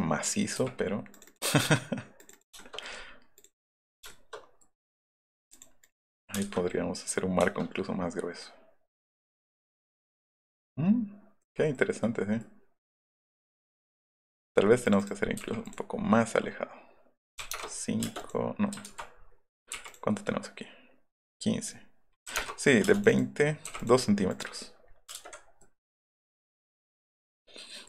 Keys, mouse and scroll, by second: 0.2 middle click, 0.6 t, 1.1 click, 2.6 shift+middle click, 3.8 click, 4.1 shift+middle click, 4.9 middle click, 5.5 click, 5.8 click, 6.1 middle click, 6.4 space, 6.5 Escape, 6.5 middle click, 8.3-10.0 middle drag, 10.5 middle click, 11.8 middle click, 12.5-14.1 middle drag, 14.9 middle click, 15.5 p, 17.4 KP_5, 17.5 Return, 18.1 space, 18.2 click, 18.9 ctrl+z, 19.8 m, 19.9 click, 22.3 KP_5, 22.4 KP_Enter, 22.8 space, 23.0 click, 23.8 click, 24.3-25.3 scroll up 4, 25.1 space, 25.2 Escape.